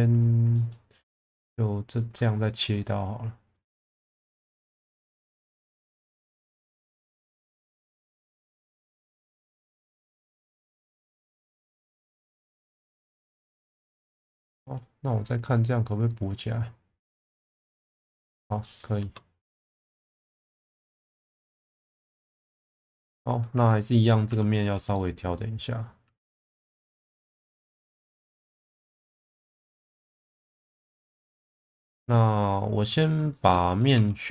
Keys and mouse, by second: 0.5 middle click, 1.9 click, 2.8 shift+click, 3.5 shift+click, 5.0 shift+click, 5.6 shift+click, 6.1 shift+click, 7.3-8.5 right drag, 9.3-10.4 middle drag, 10.7 shift+middle click, 11.1 middle click, 12.0 2, 12.3 click, 14.3 alt+click, 16.2-17.8 drag, 18.6 middle click, 19.0 Tab, 19.7-20.0 middle drag, 20.6 shift+middle drag, 21.0-22.1 middle drag, 22.7 Tab, 23.0 middle click, 23.5 2, 24.3 1, 24.9-26.5 middle drag, 26.8 shift+middle click, 27.8 click, 28.3-28.6 middle drag, 29.3-29.8 alt+middle drag, 30.3 click, 31.8 Tab, 32.3 middle drag, 33.3 shift+middle drag, 33.7 Tab, 34.0 3.